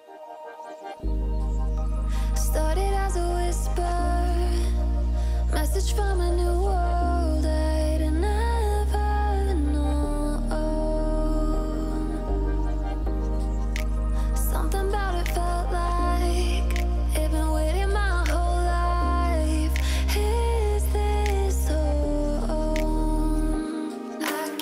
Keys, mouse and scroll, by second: 0.0 alt+scroll up 1, 0.5 click, 4.0 1, 5.1 click, 6.2 alt+scroll down 1, 6.8 click, 7.4-7.8 alt+scroll up 1, 7.8 alt+click, 10.2 alt+Num_Lock, 10.3 alt+click, 10.4-10.7 alt+scroll up 1, 10.9-13.4 drag, 14.1 ctrl+c, 15.4 click, 17.3 ctrl+v, 18.5 alt+scroll up 1, 20.0 click.